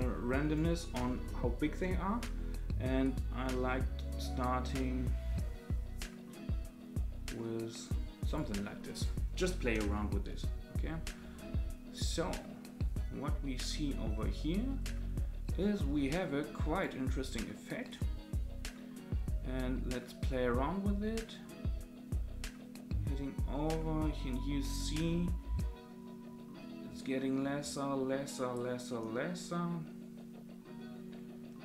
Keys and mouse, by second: 3.1-8.3 drag, 9.8 space, 16.7 click, 17.9-31.6 drag.